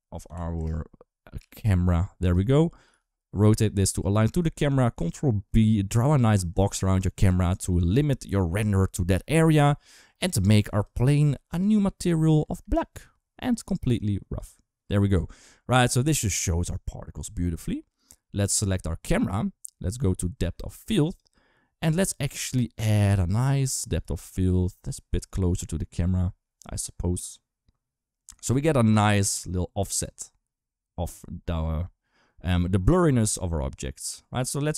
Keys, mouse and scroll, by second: 1.2 s, 2.7 r, 4.4 ctrl+b, 7.1 shift+middle click, 9.6 click, 11.3 click, 13.7-14.2 drag, 16.1 click, 18.9 click, 20.8 click, 23.9-34.7 drag.